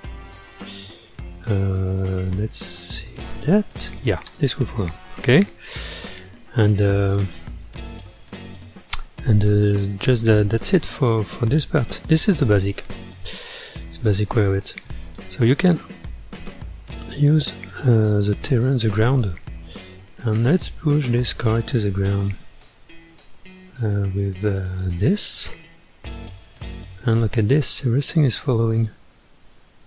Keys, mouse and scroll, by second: 1.5-3.2 scroll down 1, 3.3 space, 4.3 space, 5.3-8.2 drag, 8.2-9.8 middle drag, 9.8-10.1 scroll down 4, 10.3 space, 12.3 space, 13.1-14.3 middle drag, 14.3-15.7 scroll down 1, 15.7-18.8 drag, 18.9 click, 20.3 click, 21.6 ctrl+Tab, 21.9 click, 24.7 click, 26.7-27.5 scroll up 8, 27.5 middle click, 28.3 scroll up 1, 28.5-28.8 scroll down 4, 29.4-29.8 middle drag.